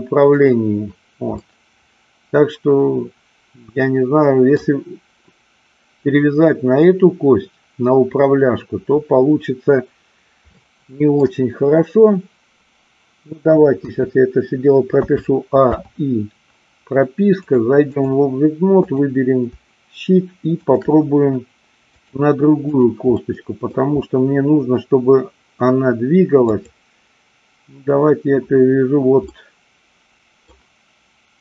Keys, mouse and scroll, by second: 0.4 click, 1.4-4.5 middle drag, 10.6-11.2 middle drag, 13.8 KP_1, 15.0 a, 15.6 i, 17.5 click, 18.8 click, 20.6 shift+click, 22.0 click, 23.1-23.8 middle drag, 26.4-27.7 drag, 29.2-30.5 middle drag.